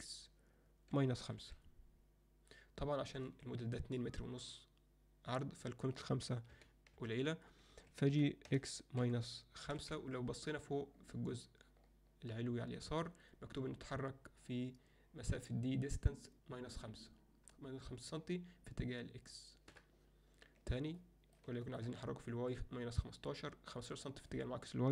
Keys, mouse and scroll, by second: 6.5 g, 8.1 g, 21.0-21.4 middle drag, 21.6 shift+middle click, 24.0 alt+shift+middle click.